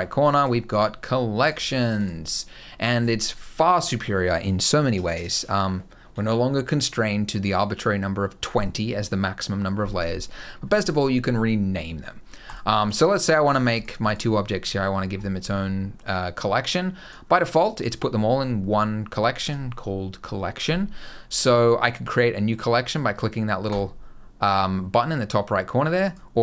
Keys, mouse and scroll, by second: 0.1 click, 1.2 click, 1.7 click, 10.5 click, 12.2 click, 13.2 click, 13.4 click, 13.8 click, 16.2 click, 17.5 click, 23.4 click, 25.8 click.